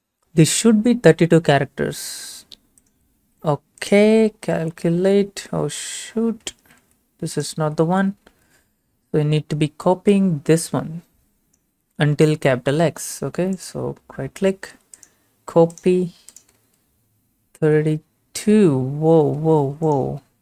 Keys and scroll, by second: 3.2 ctrl+v, 6.4 a, 7.6 ctrl+a, 8.0 BackSpace, 8.3 alt+Tab, 17.6 ctrl+v, 19.4 ctrl+a.